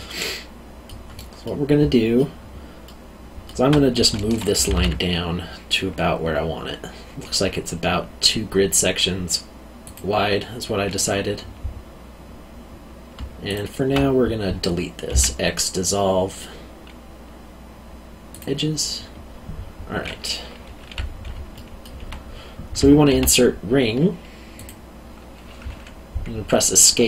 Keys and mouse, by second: 0.2 middle click, 4.6 g, 4.7 z, 9.8 click, 13.5 alt+click, 15.1 x, 18.3 click, 21.5 alt+middle click, 23.1 ctrl+r, 24.5 click.